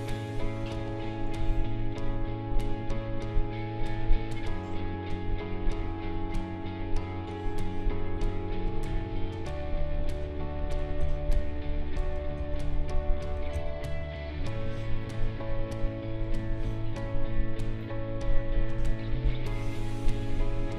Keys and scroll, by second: 0.7 space, 11.0 ctrl+z, 12.4 ctrl+z, 13.5 ctrl+z.